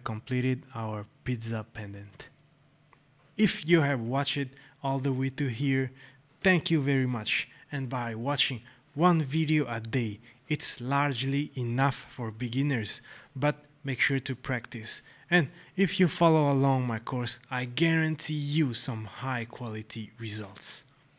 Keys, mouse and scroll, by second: 1.2 right click, 1.7 scroll.